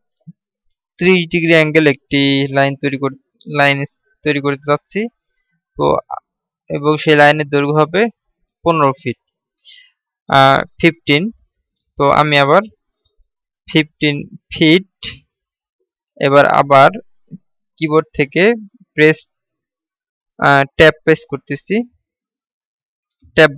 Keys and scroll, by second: 21.5 Tab.